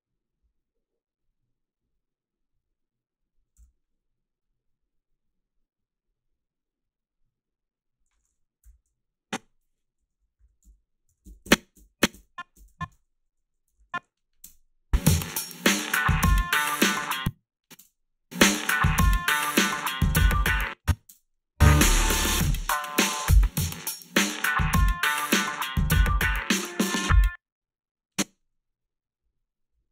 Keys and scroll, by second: 3.6 f, 10.1 Up, 10.4 i, 11.2 Down, 11.4 Left, 12.1 Down, 12.6 Left, 12.7-14.4 typing, 17.0 space, 17.8 space, 20.5 space, 21.1 space, 27.1 space.